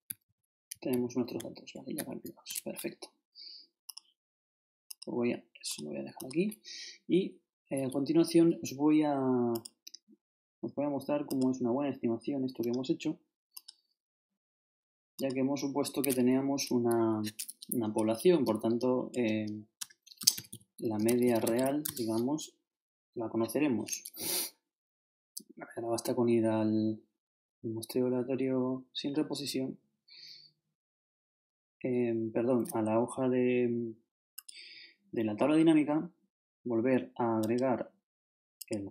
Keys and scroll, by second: 0.2 shift+Right, 1.4 shift+Down, 18.4-22.1 typing.